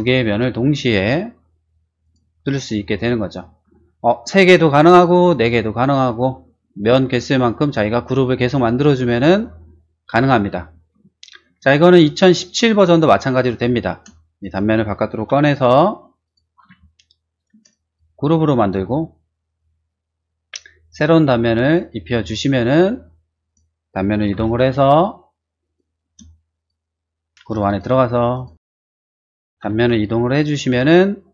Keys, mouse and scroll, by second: 2.0 click, 2.7 middle click, 3.1-4.2 shift+middle drag, 11.2 shift+middle click, 12.1 shift+click, 12.7 middle click, 13.1 middle click, 13.9 space, 14.4 click, 15.2 m, 15.4 click, 16.2 click, 16.5 middle click, 16.8 middle click, 17.5 shift+space, 17.7 click, 19.4 click, 20.8 click, 21.6 click, 22.2-23.4 middle drag, 23.4 click, 24.3 m, 24.4 click, 25.6 click, 26.0 space, 26.5 click, 27.3 m, 27.6 click, 27.8 click, 28.7 click, 29.6 m, 29.7 click.